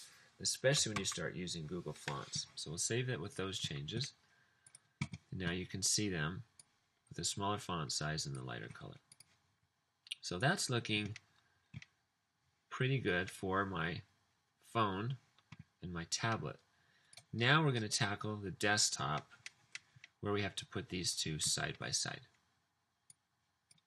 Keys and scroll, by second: 1.0 super+s.